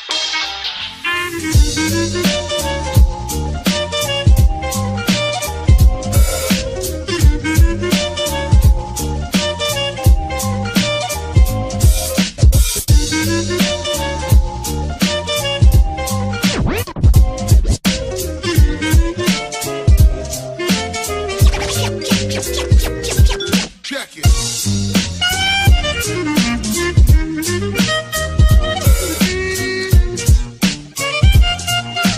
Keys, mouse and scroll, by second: 0.9 space, 2.6 space, 2.9 space, 3.5 space, 4.0 ctrl++, 5.5 space, 6.6 space, 7.5 space, 11.6 space, 12.1 space, 14.4 ctrl++, 15.1 space, 15.1 ctrl+-, 15.2 ctrl++, 15.7 space, 18.4 space, 18.7 space, 18.8 space, 19.8 space, 22.6 space, 24.8 space, 27.6 space, 28.9 space, 30.3 space, 31.8 space.